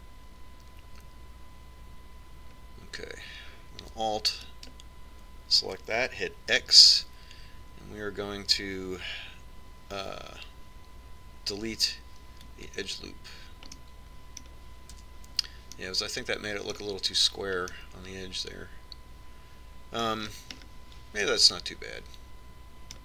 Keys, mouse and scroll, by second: 5.7-7.6 right drag, 7.8 x, 15.1-16.3 middle drag, 16.3 Tab, 17.4-18.7 middle drag, 19.6-20.7 middle drag, 21.5-23.0 middle drag.